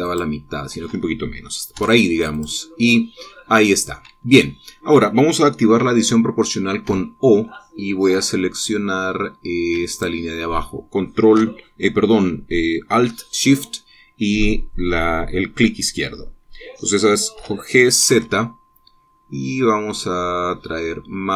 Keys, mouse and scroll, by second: 0.6 alt+shift+click, 2.3 x, 2.9 click, 7.4 o, 10.4 alt+shift+click, 17.9 g, 18.7 z, 20.5-21.0 scroll up 2.